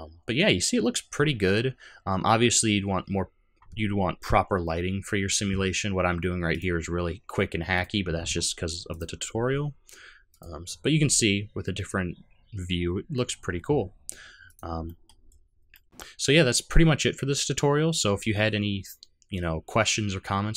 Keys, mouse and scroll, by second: 7.8 click, 8.9 click, 10.4 click, 14.6 click, 14.8 middle click, 15.2 scroll down 4, 15.7 middle click.